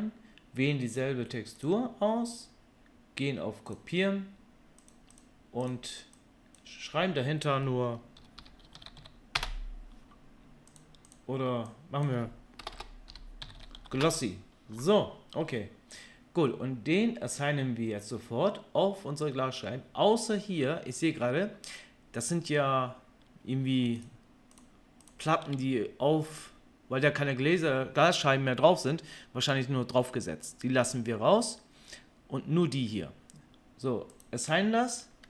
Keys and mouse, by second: 4.9 middle click, 5.2-24.0 drag, 8.9 s, 12.7 BackSpace, 13.5 s, 24.0-34.2 shift+middle drag, 34.2-35.2 drag.